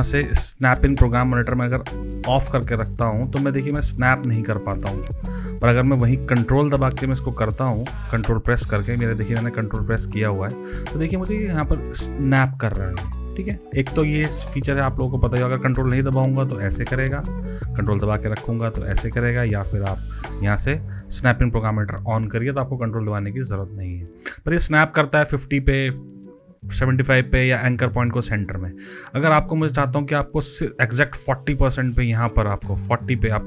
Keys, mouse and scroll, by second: 2.3 click, 3.2 click, 7.2 ctrl+click, 10.1 ctrl+click, 19.8 click, 21.8 click, 22.8 click.